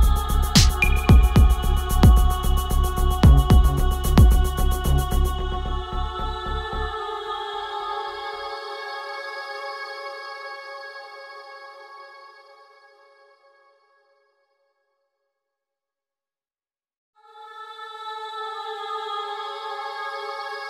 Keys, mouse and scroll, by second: 2.6 Return, 3.7 ctrl+z, 4.5 ctrl+z, 5.4 ctrl+z, 7.0 ctrl+z, 7.8 click, 10.3-13.4 drag, 16.0 click, 18.4 click, 20.4 click.